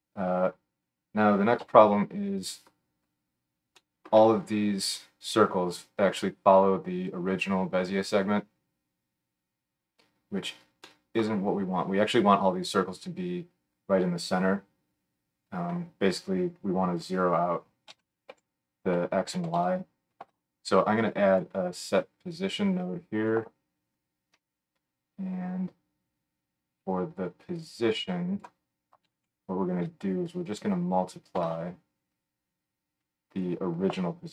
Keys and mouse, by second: 1.6 KP_1, 15.7 F3, 21.4 middle click, 21.9-33.4 drag, 33.4-34.3 middle drag.